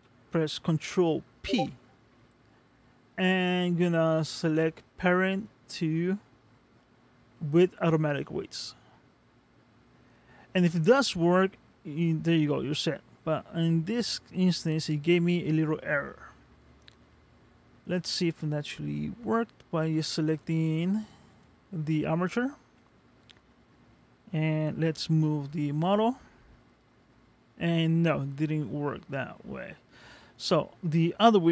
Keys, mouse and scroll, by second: 1.4 ctrl+p, 17.8 click, 20.4 click, 21.3 click, 22.6 ctrl+Tab, 25.7 g, 28.9 middle click.